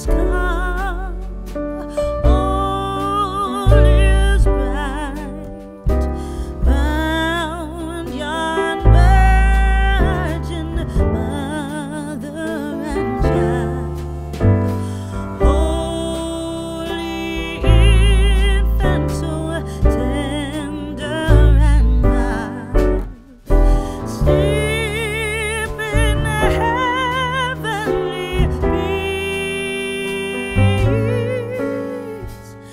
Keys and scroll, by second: 4.4 ctrl+z.